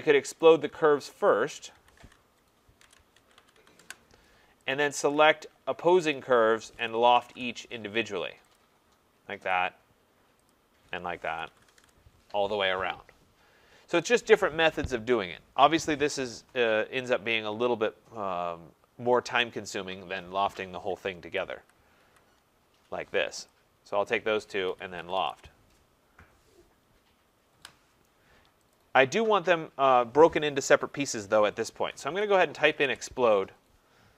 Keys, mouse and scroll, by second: 0.4 click, 1.3 shift+click, 2.2-4.1 typing, 4.7 click, 6.0 shift+click, 6.8-7.6 typing, 8.6 click, 9.5 click, 9.6-10.3 typing, 10.5 shift+click, 11.5 Return, 14.2 click, 15.8 typing, 21.0 click, 21.3 ctrl+z, 21.6 ctrl+z, 22.0 ctrl+z, 23.9 click, 24.5-26.1 typing, 26.8 Return, 27.5 Return, 28.7 click, 31.7-32.9 typing.